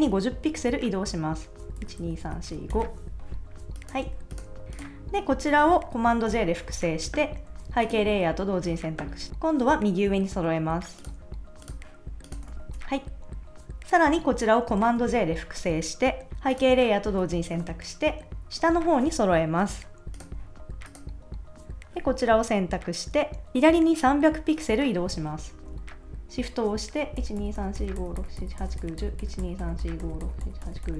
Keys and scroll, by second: 1.8 shift+Up, 4.1 super+s, 6.3 super+j, 9.3 super+z, 12.5 super+s, 15.0 super+j, 27.1 shift+Left.